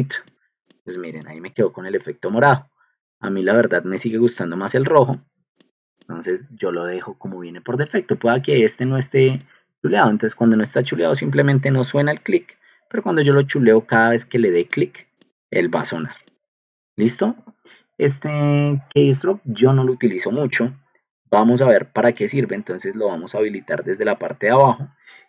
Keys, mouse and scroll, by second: 4.4 click, 5.6 click, 6.0 click, 6.2 click, 6.4 click, 9.5 click, 10.1 click, 10.5 click, 10.9 click, 11.4 click, 11.8 click, 12.9 click, 13.2 click, 24.4 click.